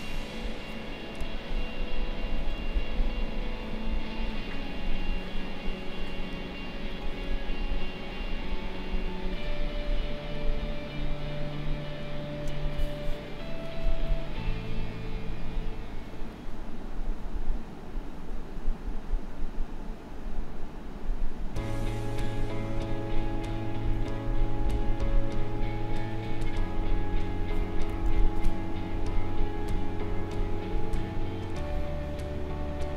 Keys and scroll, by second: 1.1 space, 28.0 ctrl+z.